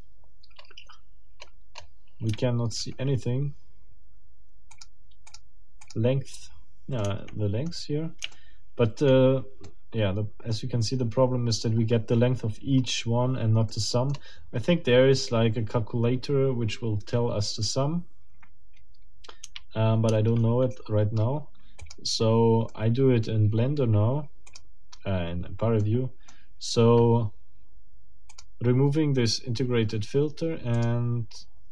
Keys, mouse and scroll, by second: 1.4-2.1 scroll up 4, 2.4 shift+middle click, 4.7 middle click, 5.3 middle click, 5.8 middle click, 6.5 scroll down 2, 7.0 shift+middle click, 7.7 shift+scroll up 1, 8.3 shift+middle click, 9.1-9.4 shift+scroll up 1, 9.7 shift+middle click, 10.5-10.8 scroll up 1, 12.5-13.3 scroll down 2, 13.7 middle click, 14.3 scroll down 2, 20.1 shift+Tab, 22.7 middle click, 24.5 click, 25.8 click, 28.3 click, 30.8 click.